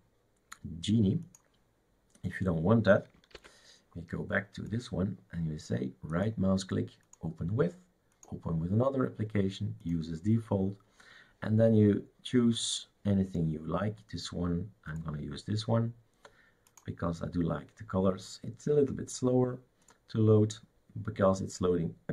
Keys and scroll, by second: 3.4 shift+super+q.